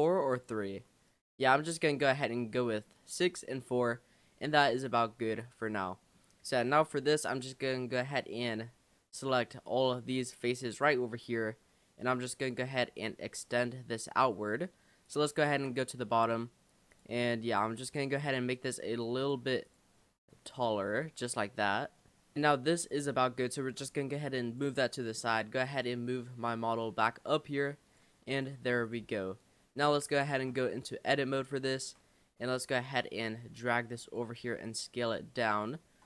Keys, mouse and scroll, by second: 0.3-0.9 drag, 0.9-3.9 middle drag, 4.9-5.3 drag, 5.3-6.3 middle drag, 6.3 scroll down 1, 6.7 Tab, 7.3 scroll down 2, 8.4 click, 9.1 click, 9.7 click, 10.7 scroll up 1, 12.4 click, 14.2 click, 15.1 shift+click, 15.9-16.9 middle drag, 16.9 click, 17.2 middle click, 18.2 click, 19.7 click, 20.0 Tab, 20.9-22.4 middle drag, 22.4 click, 22.8 click, 23.1 middle drag, 23.3 scroll down 3, 24.0 click, 25.0 drag, 25.3-25.8 middle drag, 25.8 click, 26.5 ctrl+click, 28.3 click, 28.8 click, 30.3 Tab, 31.8 a, 32.8 click, 33.6 click, 34.7 click.